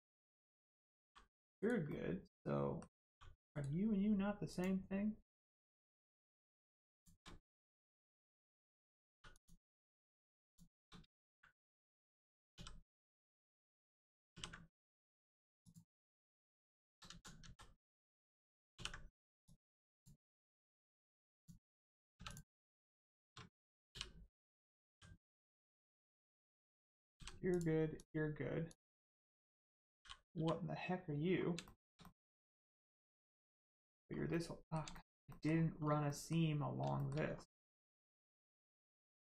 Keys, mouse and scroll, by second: 0.5-0.9 scroll up 1, 1.0 g, 1.5 right click, 1.8 middle click, 3.0 g, 3.5 right click, 4.5 click, 6.9 shift+click, 7.5 shift+middle click, 9.1 middle click, 9.3 click, 10.4 shift+click, 12.5 e, 13.3 right click, 14.3 ctrl+e, 15.6 click, 16.9 ctrl+z, 17.1 ctrl+z, 17.4 ctrl+z, 19.4 click, 22.2 click, 22.8 shift+click, 23.9 click, 24.9 g, 25.6 click, 27.9 click, 31.6 shift+middle click, 32.0 middle click, 32.1 middle click, 32.3-32.8 scroll down 1, 32.9 middle click, 34.1 scroll up 1, 34.3 middle click, 34.9 shift+middle click, 35.3 middle click, 35.3 middle click, 35.7 scroll up 1, 36.0 middle click, 36.9 shift+middle click, 37.2 scroll up 1.